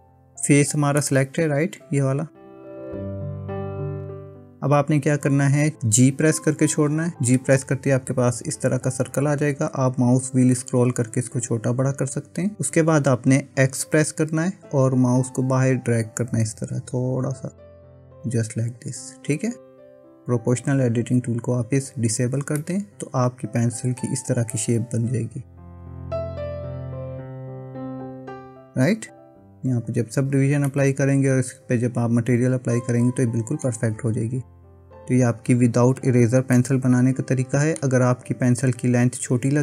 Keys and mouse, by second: 1.0-2.9 middle drag, 3.8 KP_1, 6.9 g, 22.6-27.2 middle drag, 27.4 Tab, 30.7-33.7 middle drag, 36.6-37.8 middle drag.